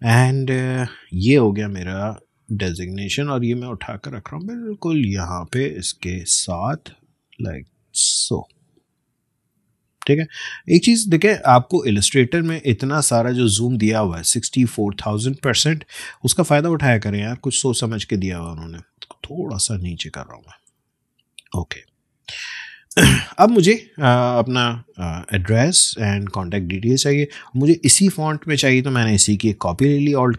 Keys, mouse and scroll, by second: 0.5-0.8 alt+scroll up 1, 2.3-5.4 drag, 5.4-5.8 alt+scroll up 1, 6.7-9.0 drag, 9.0-9.3 scroll down 2, 10.6 alt+scroll up 1, 13.3-15.8 alt+scroll down 1, 17.0 space, 17.3 click, 18.2-18.8 alt+scroll up 1, 19.5-21.1 drag, 21.1-21.9 alt+scroll down 1, 22.3 space, 22.4 click, 22.7 space, 24.7-29.9 drag.